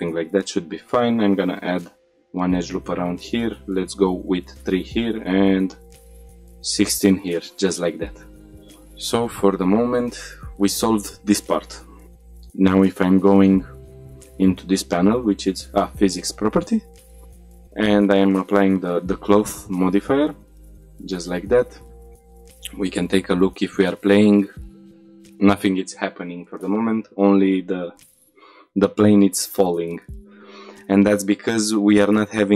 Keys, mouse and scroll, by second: 0.3 ctrl+r, 1.2 right click, 1.9 middle click, 2.6 ctrl+r, 4.0 right click, 4.8 ctrl+r, 6.5 right click, 7.1 middle click, 7.5 shift+middle click, 8.5-8.8 scroll up 2, 8.9 shift+middle drag, 9.3 scroll down 2, 9.9 middle click, 10.3 shift+middle drag, 12.4-12.9 drag, 13.1 click, 17.7 click, 20.1-20.6 scroll down 2, 20.8 shift+middle click, 21.1-21.8 middle drag, 22.4 shift+middle drag, 23.4 click, 24.3 click, 25.1 click, 29.4 click.